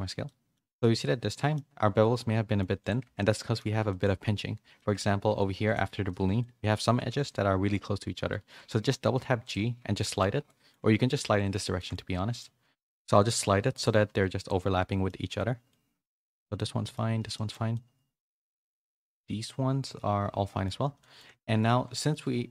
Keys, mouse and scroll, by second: 0.2 middle click, 0.7 click, 1.0 middle click, 2.1 middle click, 3.0 Tab, 3.1 middle click, 3.8 shift+middle click, 4.7 middle click, 5.3 2, 5.7 click, 6.0 middle click, 6.4 middle click, 7.0 g, 8.6 g, 10.1-11.6 middle drag, 11.8 middle click, 12.2 middle click, 13.7 click, 15.0 middle click, 16.7 middle click, 17.4 shift+middle click, 17.8-18.9 middle drag, 19.1-20.7 middle drag, 21.1 middle click, 21.4 shift+middle click, 21.9 middle click.